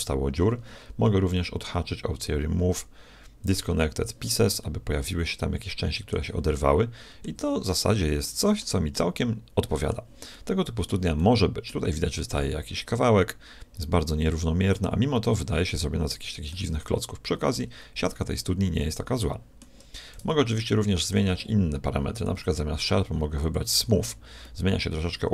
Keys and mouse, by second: 3.4-4.6 drag, 4.6-14.6 middle drag, 15.7 middle click, 16.8 z, 18.6 middle click, 20.2 z, 20.6 middle click, 22.3-24.1 drag, 24.1 middle click, 24.8-25.3 middle drag.